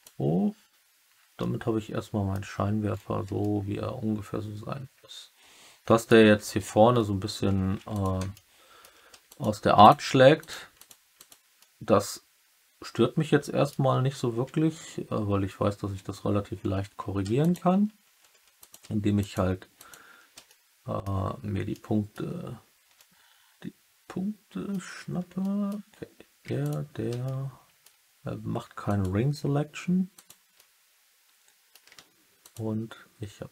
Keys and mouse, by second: 1.3 alt+middle click, 3.3-6.0 alt+middle drag, 8.2 alt+middle click, 9.2 alt+click, 9.2 typing, 10.3 click, 10.7 click, 11.1 click, 11.5 alt+middle click, 12.3 alt+click, 12.9 alt+middle click, 16.7 3, 17.3 alt+click, 18.2 2, 19.1 alt+click, 19.7 alt+click, 20.4 alt+click, 21.6 alt+click, 22.9 alt+click, 23.4-24.6 alt+middle drag, 25.3 alt+middle click, 26.5 alt+shift+click, 27.2 alt+middle click, 30.1 alt+click, 30.5 alt+middle click, 30.9 alt+click, 31.4 alt+middle click, 32.3 alt+shift+click.